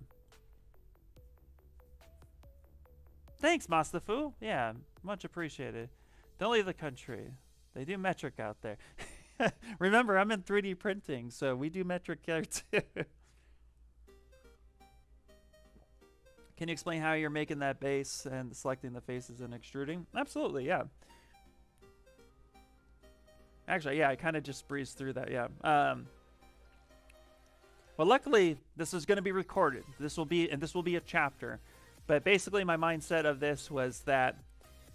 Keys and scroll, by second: 0.3 q, 26.6 shift+f, 34.1 ctrl+z.